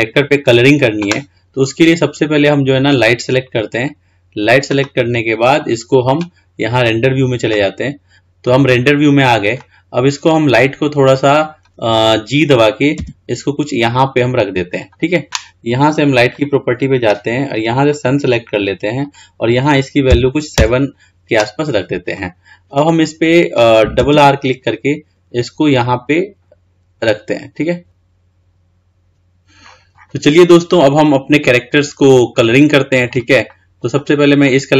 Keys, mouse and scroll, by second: 2.2-3.9 scroll down 3, 3.9 click, 9.8-11.4 middle drag, 11.4 click, 13.2 g, 16.9 click, 18.2 click, 19.1-22.2 drag, 22.3-24.2 middle drag, 24.2 r, 29.9-30.4 scroll up 11, 30.6 scroll down 3, 32.0-34.7 middle drag.